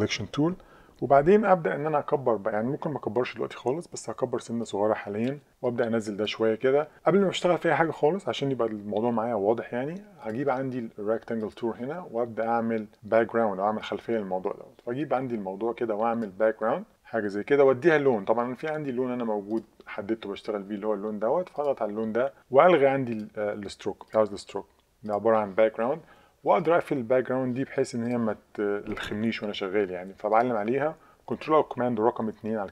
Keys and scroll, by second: 32.2 super+2.